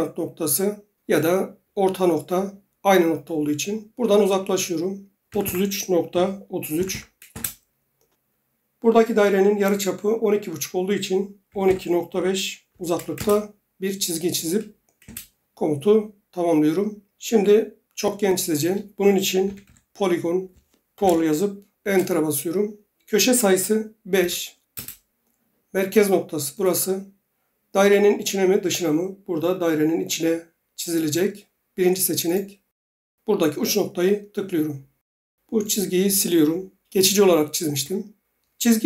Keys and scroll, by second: 4.4 Return, 5.3-6.9 typing, 7.3 Return, 11.2-13.2 typing, 15.0 Return, 19.2-20.9 typing, 21.8 Return, 23.9-24.7 typing, 24.7 Return, 31.1 typing, 37.7 Delete.